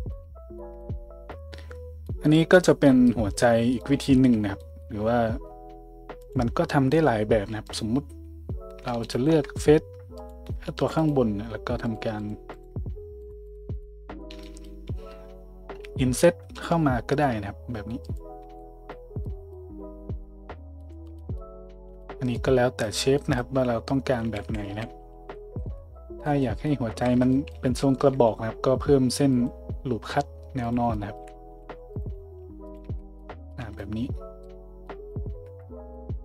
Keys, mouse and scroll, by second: 0.2 a, 4.1 Tab, 4.1-6.3 middle drag, 4.9 Tab, 6.3-10.3 drag, 7.6 middle click, 7.6 right click, 9.0 shift+middle click, 9.0 shift+right click, 10.3 middle click, 11.0 shift+click, 11.1 shift+middle click, 11.8 shift+click, 11.9 shift+middle drag, 12.2 shift+click, 12.3 shift+middle drag, 12.5 shift+click, 12.6-13.2 shift+middle drag, 13.2 shift+click, 13.3 shift+middle click, 13.5 shift+click, 13.5 shift+middle click, 13.7 shift+click, 14.1 shift+click, 14.2-18.4 shift+middle drag, 18.4 Tab, 22.3-23.5 middle drag, 23.5 Tab, 24.4 ctrl+z, 24.7 ctrl+z, 25.6 Tab, 27.1 Tab, 27.5 a, 28.0 ctrl+r, 31.2 a, 31.6 ctrl+r, 32.8 Tab, 33.6 a, 35.3 Tab.